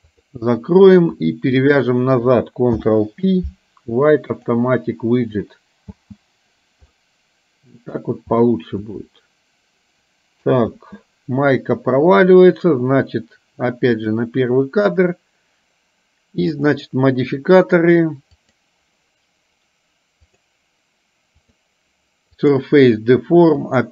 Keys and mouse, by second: 0.1 click, 1.6 shift+click, 2.9 ctrl+p, 6.1 space, 7.1-8.3 middle drag, 9.1-10.8 middle drag, 10.9 space, 14.3 click, 18.5 click, 21.5-22.8 drag.